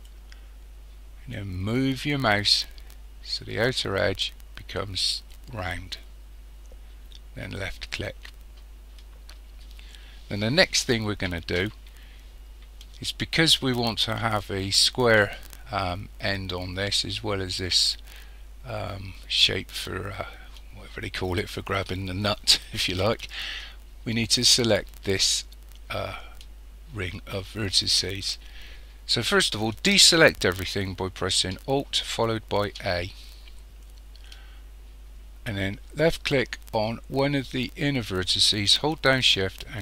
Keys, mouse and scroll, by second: 32.7 alt+a, 36.0 click.